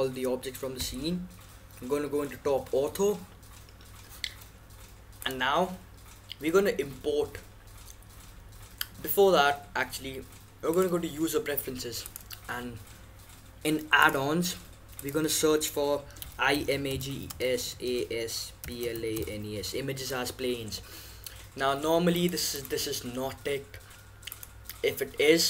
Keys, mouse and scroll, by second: 0.1 KP_7, 5.2-7.0 drag.